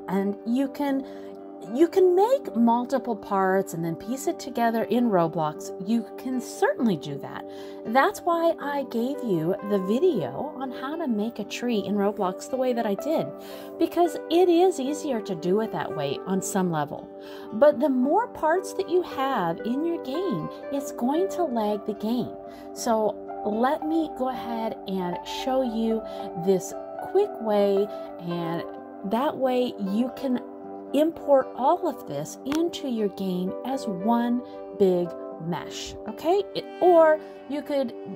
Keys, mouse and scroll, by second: 0.9 middle click, 1.6 scroll down 1, 1.8 middle click, 2.9 middle click, 4.0 click, 4.4 middle click, 5.5 click, 6.7 middle click, 7.3 shift+middle click, 7.6 shift+scroll down 1, 7.6 middle click, 9.5 click, 11.4 l, 13.4 shift+d, 15.1 click, 19.1 click, 19.8 click, 20.8 click, 23.5 click, 24.7 click, 25.9 middle click, 26.9-27.6 scroll up 1, 27.6 middle click, 28.6 middle click, 29.4 click, 29.9 middle click, 31.5 click, 32.7 middle click, 33.8 click, 34.6 click, 35.9 middle click.